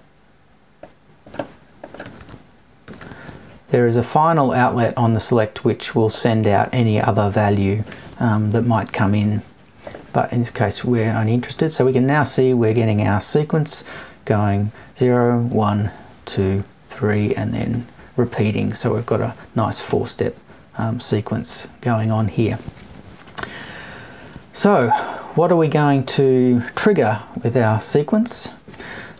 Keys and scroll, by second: 8.4 Down, 27.1 Left.